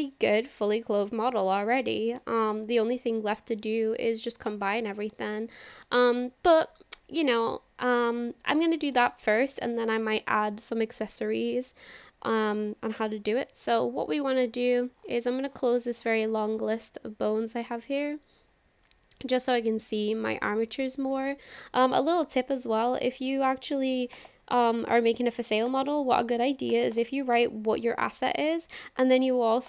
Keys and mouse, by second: 0.3-1.5 middle drag, 1.9-2.3 shift+middle drag, 2.4-4.9 middle drag, 5.2-5.5 shift+middle drag, 6.0-6.3 shift+middle drag, 7.1 shift+middle click, 7.6-8.8 middle drag, 9.0-9.4 shift+middle drag, 9.5 middle click, 17.5 click, 21.1-25.8 drag, 26.8 click, 27.0-29.6 drag.